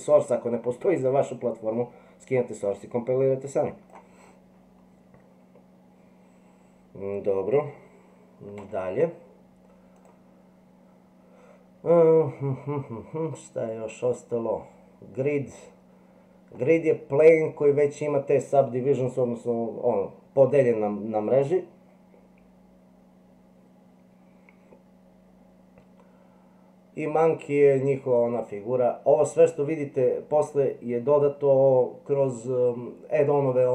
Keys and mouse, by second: 8.6 Delete, 10.0-33.7 drag.